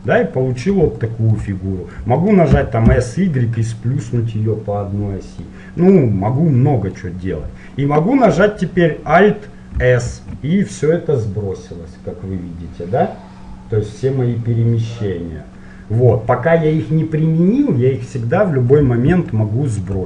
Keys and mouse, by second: 2.7 s, 4.8-7.5 middle drag, 10.2 alt+s, 16.0-20.0 middle drag.